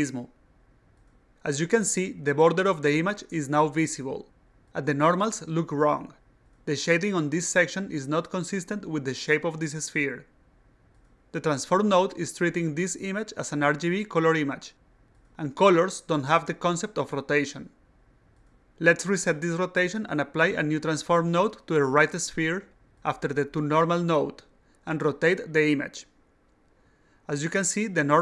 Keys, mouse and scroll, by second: 19.8 click, 20.7 click, 21.4-22.4 drag, 22.6 click, 24.4 click, 26.2-28.2 drag.